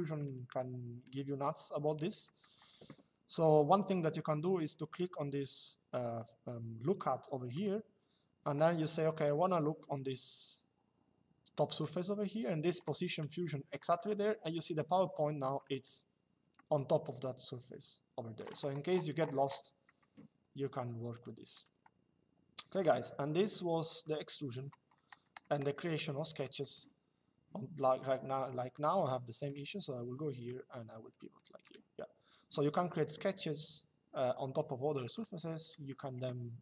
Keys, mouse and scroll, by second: 1.9 middle click, 7.3 click, 11.5 click, 13.7 shift+middle click, 16.2 shift+middle click, 19.6 middle click, 20.8 click, 22.6 click, 23.8 click, 25.6 middle click, 28.4 click, 30.2 middle click, 34.9 click.